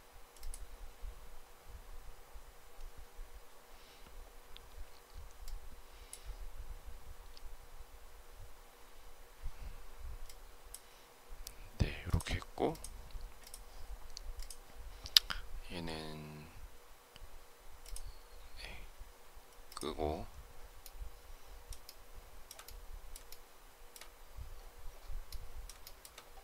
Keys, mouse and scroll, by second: 21.8 shift+middle click, 23.2 shift+middle click, 25.7 shift+middle click.